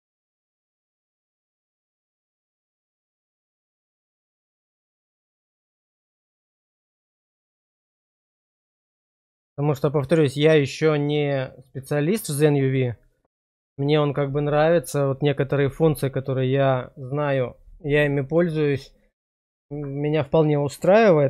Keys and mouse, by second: 4.0 middle click, 5.4-7.0 middle drag, 7.4 middle click, 8.1 shift+middle click, 8.7 middle click, 9.1 shift+middle click.